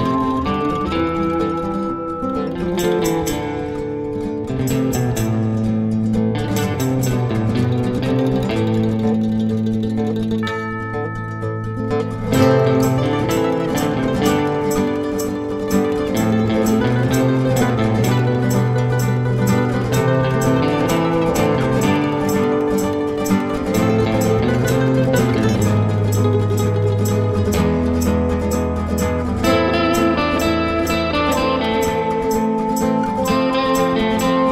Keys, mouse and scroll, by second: 0.5 F9, 6.9 click, 7.6-8.0 scroll down 1, 8.0-8.6 scroll up 1, 8.6 click, 11.0 click, 12.2 click, 14.6 click, 16.0 F4, 16.5 click, 17.5 F9, 20.9 F9, 21.6 click, 22.7 ctrl+o, 24.0 click, 25.4 click, 27.9 click, 28.9 click, 29.8 F2, 31.8 F4, 34.1 click.